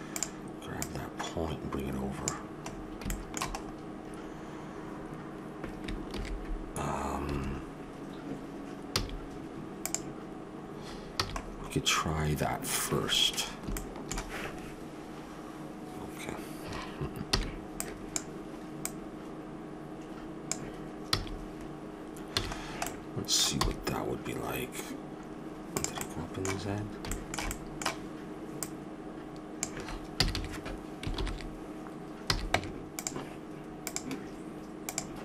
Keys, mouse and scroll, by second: 0.1-1.9 drag, 2.7-4.9 middle drag, 2.7-3.1 scroll up 1, 6.1 ctrl+r, 8.9 a, 9.8-11.4 drag, 11.2 a, 11.4-11.7 scroll up 1, 13.7 middle click, 17.3 b, 18.8-20.8 drag, 21.1 a, 22.5 a, 22.9 middle click, 23.5 e, 25.3 click, 28.6-30.5 drag, 30.2 a, 30.3 a, 31.1 ctrl+n, 32.2 a, 32.5 Tab, 33.9 click.